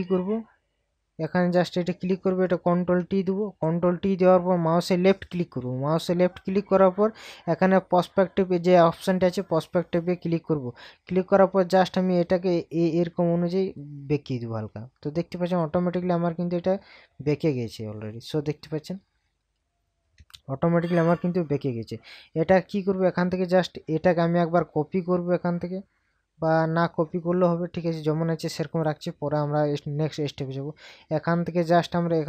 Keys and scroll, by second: 2.6 ctrl+t, 19.6 ctrl+KP_Subtract.